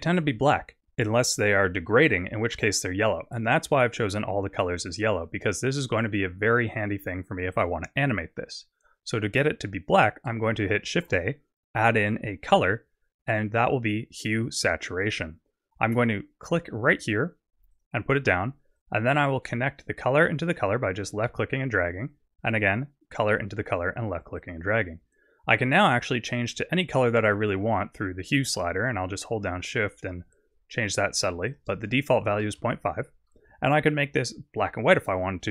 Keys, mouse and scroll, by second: 4.9 click, 11.0 shift+a, 18.8 click, 22.6 click, 24.4 click, 26.4 click, 31.5 click, 34.6 click.